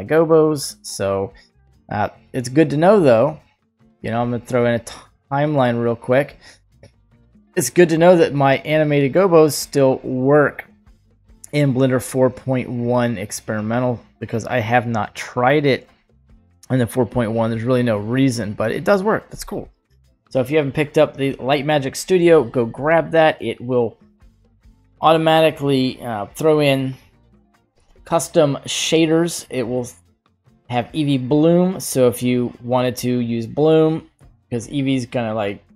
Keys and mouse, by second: 0.5 right click, 1.2-4.1 right drag, 5.2-6.3 drag, 7.1 click, 7.9 click, 9.9-10.3 drag, 19.6 click, 21.9-22.5 drag, 23.6-24.7 drag, 25.1 right click, 26.8 click, 33.5 click.